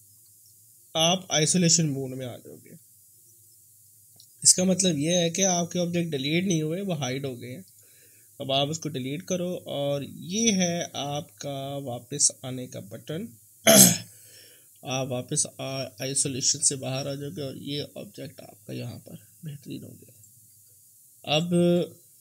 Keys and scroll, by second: 5.1 F3, 8.7 Delete.